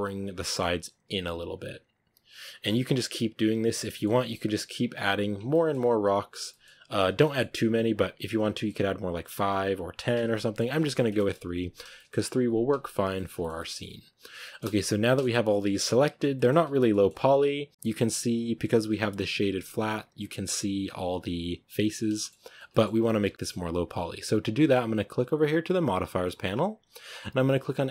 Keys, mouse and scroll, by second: 0.3 middle click, 1.0 right click, 1.1 g, 1.6 scroll up 1, 1.8 right click, 1.9 g, 3.1 right click, 3.2 g, 3.6 Tab, 3.7 middle click, 4.0 Tab, 4.6 right click, 4.7 g, 5.3 Tab, 5.4-5.7 middle drag, 5.7 Tab, 5.9 right click, 6.0 g, 6.4-6.8 middle drag, 6.8 g, 7.1 middle click, 7.7 right click, 7.8 g, 9.1 right click, 9.2 g, 10.0 Tab, 10.1-10.8 scroll down 4, 10.2-10.6 middle drag, 10.8-12.1 shift+middle drag, 12.1-13.0 scroll up 2, 13.0-14.9 shift+middle drag, 14.9-15.7 scroll up 1, 15.7 middle drag, 15.9-16.7 scroll up 4, 16.2 shift+middle drag, 16.8-17.1 shift+middle drag, 17.1-17.7 scroll up 3, 17.7-21.8 middle drag, 21.8 scroll down 3, 22.0-22.4 shift+middle drag, 22.4 scroll down 2, 22.6 shift+middle click, 23.1 scroll down 1, 23.2-27.9 shift+middle drag.